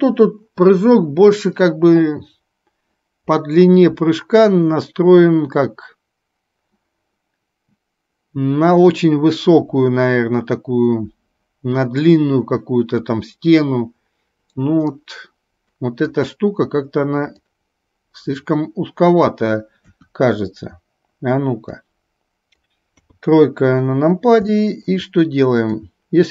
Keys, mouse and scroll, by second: 15.0-16.2 middle drag, 17.6-19.5 drag, 20.1 KP_1, 22.0 click, 23.1 KP_3, 24.7 middle click, 26.1-26.3 drag.